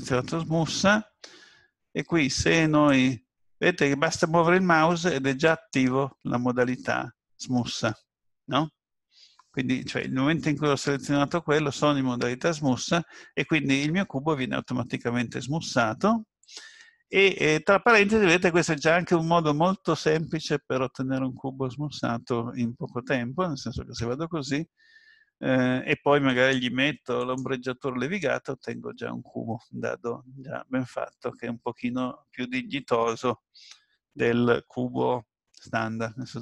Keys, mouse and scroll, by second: 2.9 click, 14.2-14.7 scroll up 2, 24.0 Tab, 26.3 right click, 28.1 middle click.